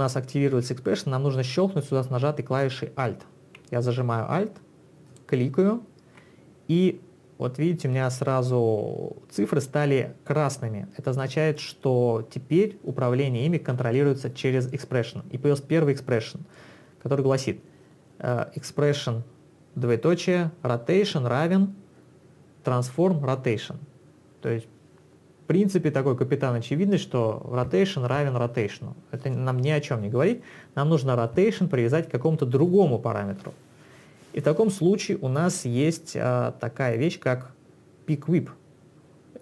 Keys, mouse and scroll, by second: 5.1 alt+click.